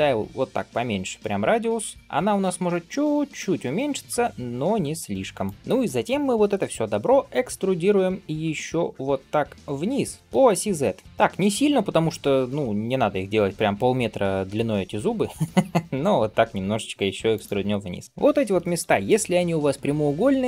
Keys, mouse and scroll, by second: 5.5 shift+middle click, 5.5-5.9 scroll up 1, 18.0 middle click, 18.0-18.5 scroll down 2, 18.7 alt+z, 18.9-20.4 middle drag.